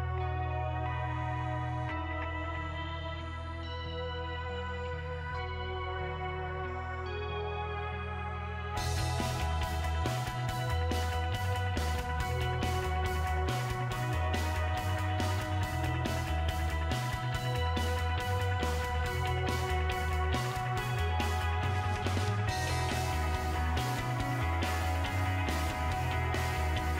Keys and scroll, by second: 15.7-18.3 typing, 19.4 Right, 19.8 BackSpace, 20.0 BackSpace, 25.5-26.9 typing.